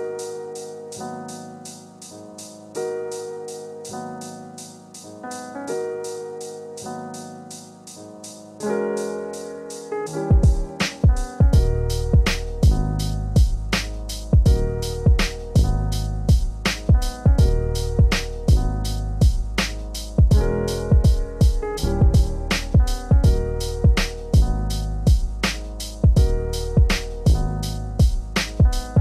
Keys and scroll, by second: 4.0 ctrl+space, 17.5 ctrl+a, 23.2 ctrl+space, 28.6 ctrl+space.